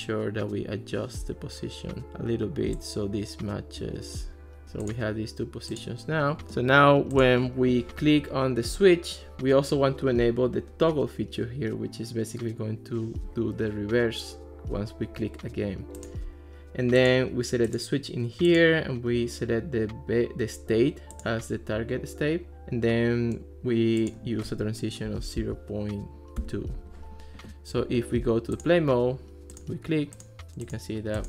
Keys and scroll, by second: 25.1 ., 25.4 2, 26.4 Return.